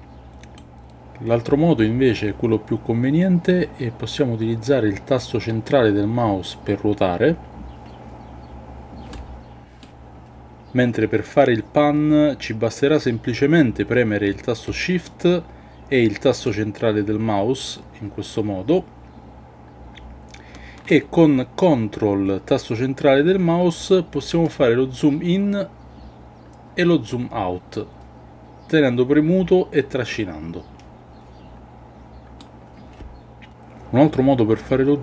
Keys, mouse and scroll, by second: 5.7-9.1 middle drag, 9.8-14.6 middle drag, 16.4-20.9 shift+middle drag, 24.5-32.4 ctrl+middle drag.